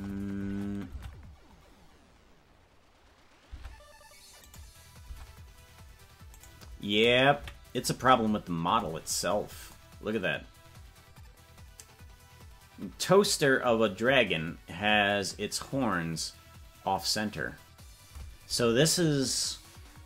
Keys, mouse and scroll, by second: 0.0-0.5 scroll up 8, 0.9 Tab, 1.6 scroll down 3, 4.0 Tab, 4.5 right click, 5.0 Tab, 6.3-7.3 right drag, 7.3 KP_Decimal, 8.9 scroll down 5, 9.7 scroll down 2.